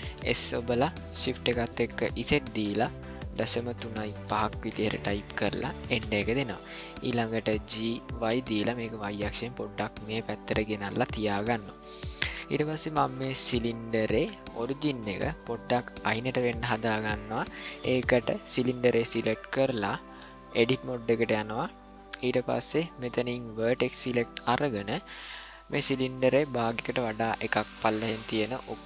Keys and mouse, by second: 0.2 s, 7.7 g, 11.3-12.3 ctrl+middle drag, 12.6-13.1 shift+middle drag, 13.5-14.1 ctrl+middle drag, 18.6 click, 20.0-21.5 drag, 23.7 click, 27.6-28.8 drag.